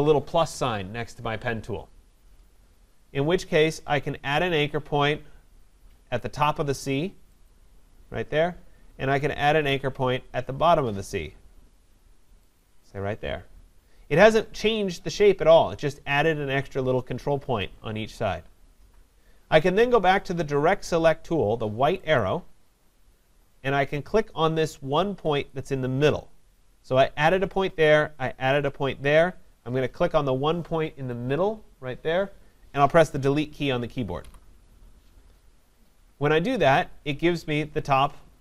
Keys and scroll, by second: 34.2 Delete.